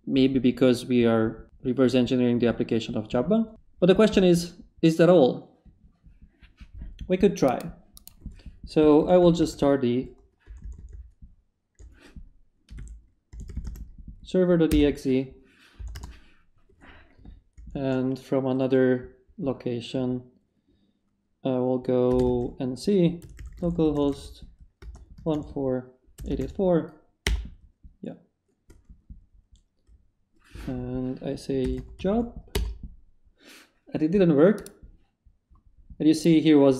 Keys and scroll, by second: 8.8-10.5 typing, 12.7-14.7 typing, 15.8 BackSpace, 15.9 Return, 17.5 ctrl+shift+t, 21.8-26.9 typing, 27.2 Return, 31.4-32.5 typing, 32.5 Return.